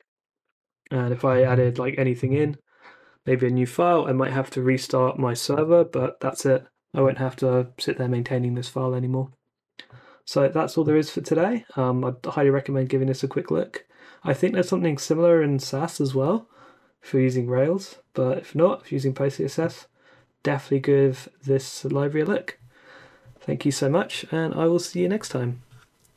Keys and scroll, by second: 0.0-0.4 typing.